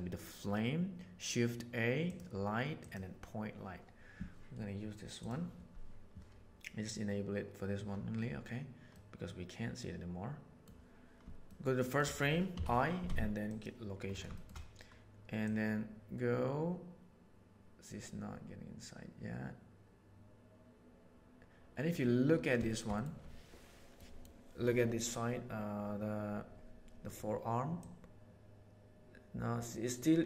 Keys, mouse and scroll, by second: 5.2 click, 8.9-10.6 middle drag, 11.4 shift+middle drag, 11.8 shift+middle click, 14.3 shift+middle click, 15.4 click, 21.4 click, 22.6 shift+middle click, 23.9 middle click, 27.8-30.0 drag.